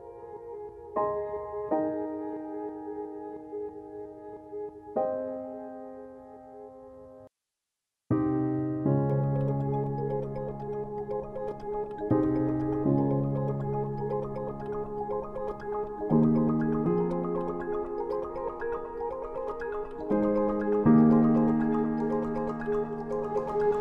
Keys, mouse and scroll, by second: 5.2 click, 6.7 right click, 8.7 click, 17.4 click.